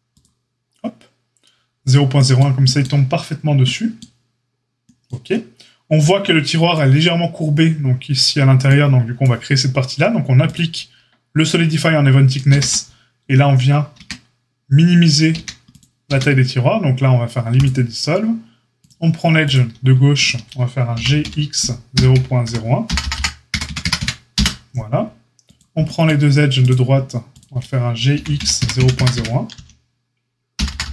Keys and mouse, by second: 10.5-18.7 ctrl+middle drag, 12.4 ctrl+a, 13.9 Tab, 15.3 a, 16.0 q, 18.7 click, 19.5 shift+middle click, 20.1 shift+click, 20.2-26.6 shift+middle drag, 20.9 g, 26.6-26.9 drag, 26.9 shift+middle click, 27.2 shift+click, 27.3-30.9 shift+middle drag, 28.1 g.